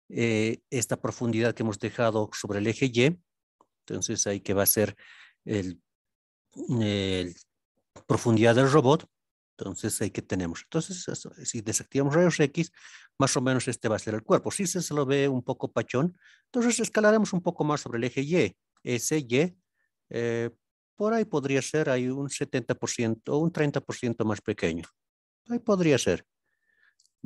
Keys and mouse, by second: 0.0 middle drag, 1.6 KP_3, 6.5-7.1 drag, 10.7-11.3 middle drag, 11.8 alt+z, 12.3-14.3 middle drag, 16.9 middle click, 19.1 y, 22.9 KP_Decimal, 23.2 KP_7, 25.9-26.6 middle drag, 27.2 KP_1.